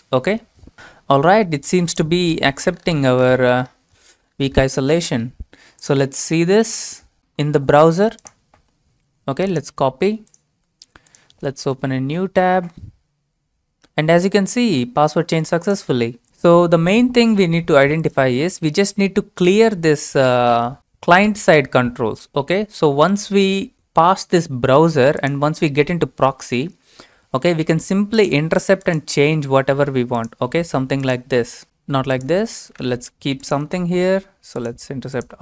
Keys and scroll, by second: 11.6 ctrl+v, 11.8 Return, 32.5-33.3 typing, 33.7 alt+Tab.